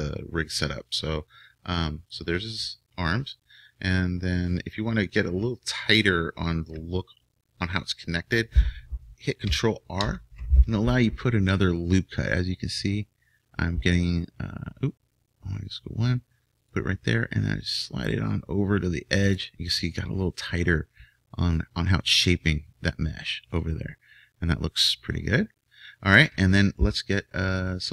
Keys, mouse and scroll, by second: 10.0 ctrl+r, 19.9-21.6 middle drag.